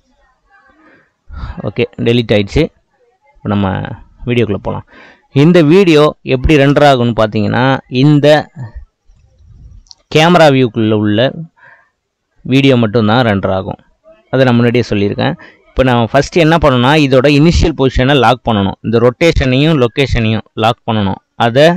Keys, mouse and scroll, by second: 4.2-6.7 scroll down 2, 6.7 KP_0.